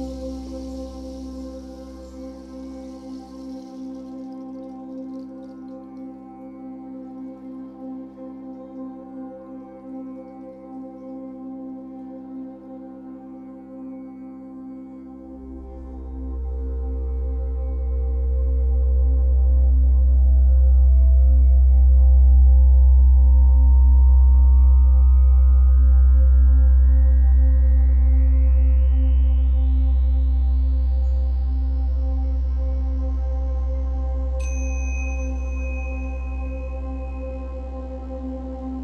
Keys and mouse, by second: 1.5 shift+click, 1.5 shift+middle click, 1.5 shift+right click, 2.6 drag, 3.5 g, 5.8 click, 6.8 typing, 7.1 alt+shift+click, 9.6 click, 9.6 typing, 10.9-12.5 drag, 13.1-14.6 drag, 15.0-16.4 drag, 20.6-22.3 drag, 21.9 typing, 22.5 alt+shift+click, 23.6 alt+shift+click, 25.0 ctrl+s, 25.0 click, 25.0 typing, 27.1-29.7 drag, 29.9-32.4 drag, 32.4 ctrl+s, 34.9-38.8 drag.